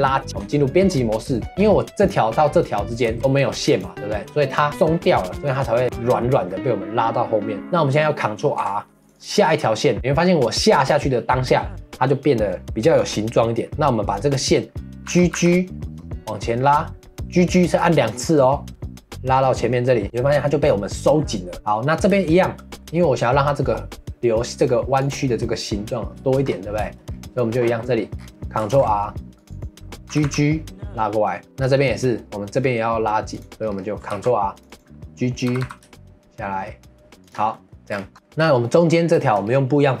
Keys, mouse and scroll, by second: 1.3 shift+middle click, 1.9 click, 3.7 click, 5.1-8.4 middle drag, 8.4 ctrl+r, 20.0-22.0 middle drag, 22.0 scroll up 1, 22.2-25.0 shift+middle drag, 25.0 click, 26.2 shift+middle click, 26.4-26.8 scroll up 2, 26.8 shift+middle click, 27.1-27.8 scroll up 1, 27.8 middle click, 28.1-28.7 scroll down 2, 28.7 ctrl+r, 30.1 g, 31.4-33.3 shift+middle drag, 33.3 click, 33.6-34.1 scroll up 2, 34.1 ctrl+r, 37.5 middle click, 37.9-38.6 scroll down 4, 38.1 middle click, 38.6 middle click, 38.8-39.2 scroll up 1, 39.2 shift+middle click, 39.4-40.0 scroll up 1.